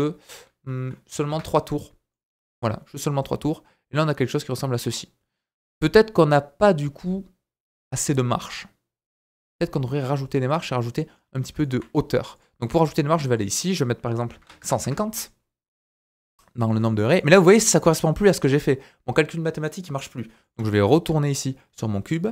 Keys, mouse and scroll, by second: 2.1 middle click, 12.1 shift+middle click, 12.4 click, 16.3-20.3 middle drag, 16.3-16.8 scroll down 4, 17.4-18.3 scroll up 1, 21.3 click.